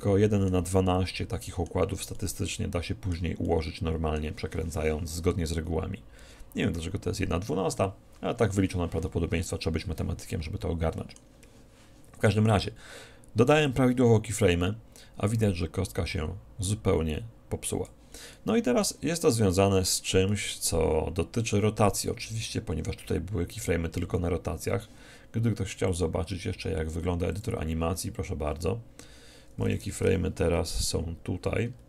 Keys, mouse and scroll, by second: 10.3-13.4 middle drag, 13.7-15.5 drag, 18.4-22.1 middle drag, 26.9-31.8 drag.